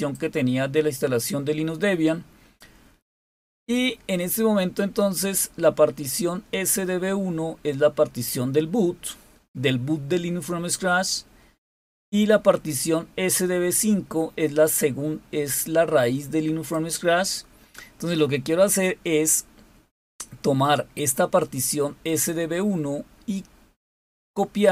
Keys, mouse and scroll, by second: 5.1-8.9 drag, 13.3-17.3 drag, 22.0 click.